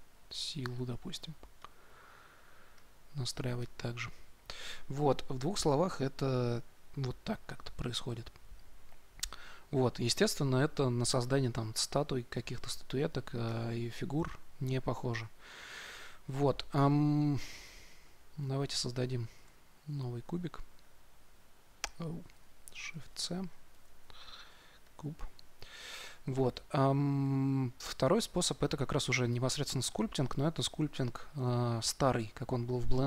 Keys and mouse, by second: 0.7 f, 1.5-19.7 drag, 19.3 shift+a, 22.3 ctrl+z, 23.0 shift+c, 23.7 shift+a, 27.1-33.0 middle drag.